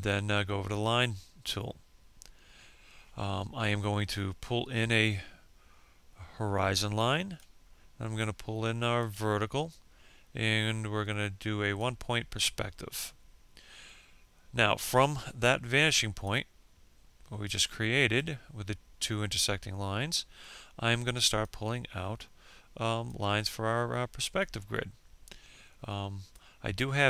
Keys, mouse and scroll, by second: 0.3 click, 4.5-7.8 ctrl+drag, 8.6-11.4 ctrl+drag, 15.8-27.0 drag.